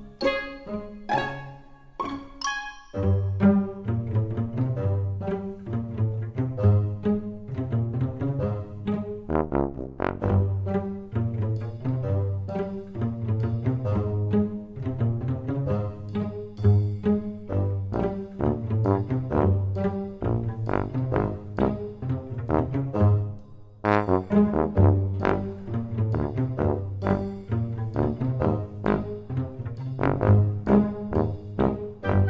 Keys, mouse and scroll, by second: 0.4 scroll up 1, 0.4 super+z, 1.2 x, 3.6 click, 6.2 i, 18.6 alt+click, 19.2 click, 20.4 alt+click, 21.0 alt+click, 23.9 g, 29.8 Tab, 31.0 click.